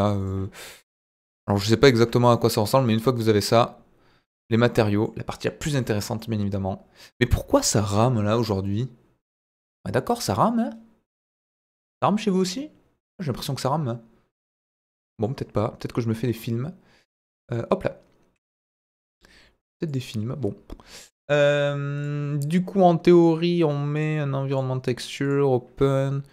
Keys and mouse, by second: 0.8 KP_1, 2.1 middle click, 3.4 click, 4.5 middle click, 6.1-10.5 middle drag, 12.4-15.3 middle drag, 19.8 click, 25.2 drag.